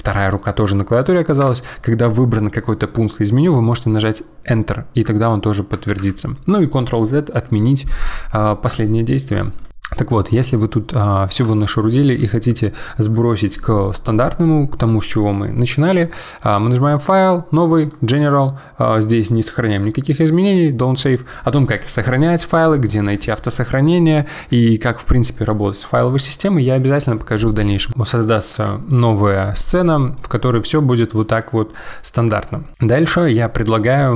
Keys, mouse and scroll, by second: 5.9 ctrl+z, 10.5-13.6 middle drag, 16.3-19.5 drag, 30.1-32.7 middle drag.